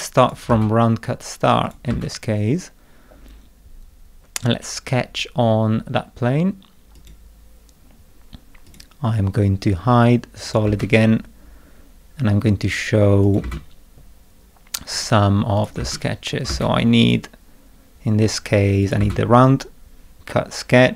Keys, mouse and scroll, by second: 0.2 click, 0.5 space, 1.6 click, 1.9 space, 6.9 click, 8.6 click, 9.9 middle click, 10.4 click, 10.6 space, 13.2 click, 13.4 space, 14.9 click, 15.6 click, 15.8 space, 16.5 space, 17.0 click, 18.8 click, 19.0 space.